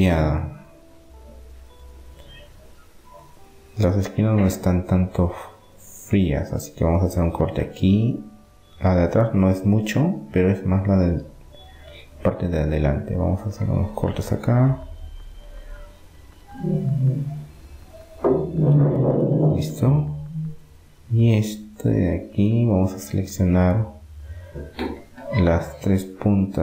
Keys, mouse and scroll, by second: 2.0-3.7 middle drag, 5.0 ctrl+r, 7.1 click, 10.4 middle click, 10.4-11.6 drag, 11.9 ctrl+r, 14.6 middle click, 17.6-21.4 middle drag, 22.6-25.0 middle drag.